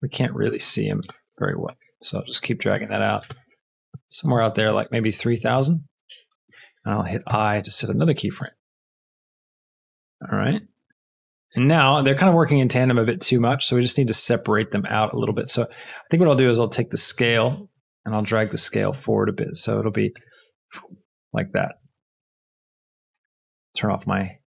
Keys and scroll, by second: 5.3 KP_3, 5.5 KP_0, 6.1 Return, 7.2 i, 8.3 space, 17.8 shift+g, 20.2 space.